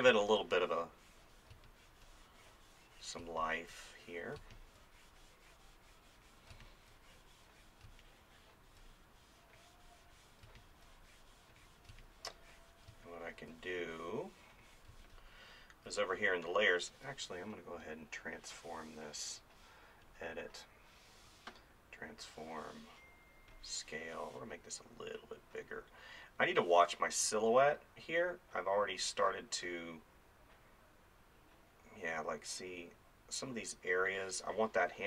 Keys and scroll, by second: 0.1 space, 3.3 space, 6.5 space, 10.5 space, 14.9 space.